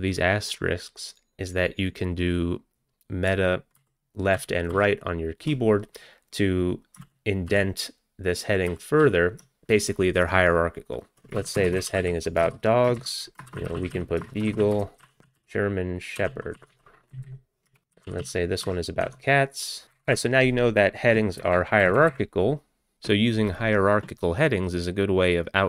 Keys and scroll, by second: 3.8 alt+Right, 4.4 alt+Left, 4.7 alt+Right, 7.1 alt+Right, 7.6 alt+Left, 8.7 alt+Right, 9.1 alt+Left, 11.1 ctrl+p, 11.4 ctrl+BackSpace, 11.4-20.3 typing, 13.0 ctrl+n, 18.1 Down, 18.7 ctrl+BackSpace.